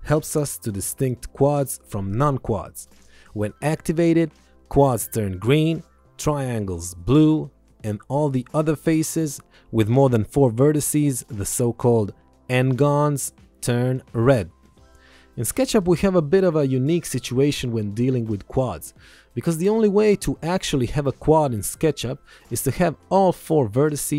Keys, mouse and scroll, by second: 9.8 click, 23.1 alt+y.